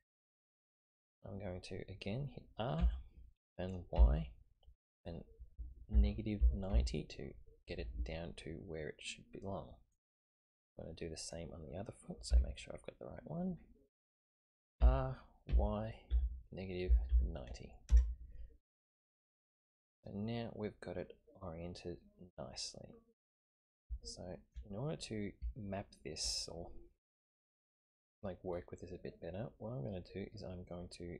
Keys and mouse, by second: 2.8 r, 11.2 click, 12.3 g, 14.8 r, 19.2-23.8 middle drag, 24.0-24.6 shift+middle drag, 25.5 shift+middle click, 29.2-30.7 middle drag.